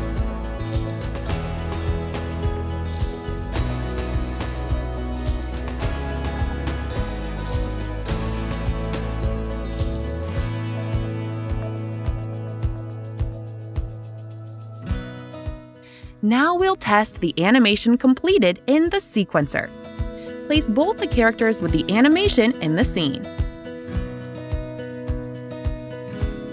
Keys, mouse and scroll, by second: 0.0 scroll, 4.4 click, 5.8 click, 7.6 click, 12.9 click, 14.0 click, 16.9 click, 17.8 click, 19.9 click, 21.0 click, 23.0 click.